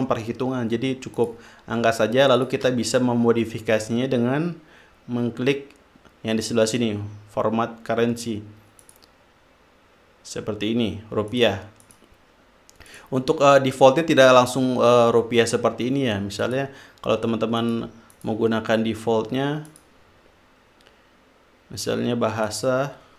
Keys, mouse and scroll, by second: 0.0-1.0 drag, 1.5 click, 2.7 shift+click, 9.2 click, 11.7 click, 12.2 click, 13.3 click, 16.8 click, 18.0 click, 18.5 click, 20.1 click, 22.8 click.